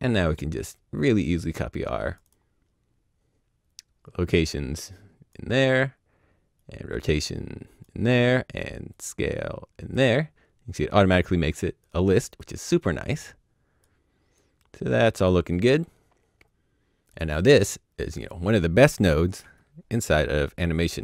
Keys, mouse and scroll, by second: 4.0 click, 11.8 click, 18.1 click, 20.7 click.